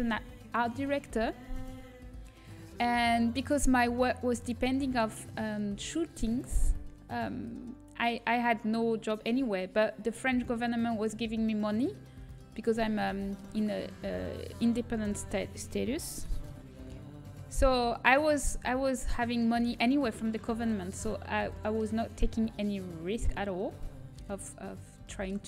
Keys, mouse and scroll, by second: 7.6 click, 8.3-9.6 middle drag, 9.7-12.4 middle drag, 12.4-14.9 drag, 13.9-14.9 middle drag, 14.9 ctrl+KP_Add, 16.9 shift+d, 18.8 g, 20.3 KP_1, 21.6-23.3 middle drag, 23.3-24.4 drag, 24.4-25.4 middle drag.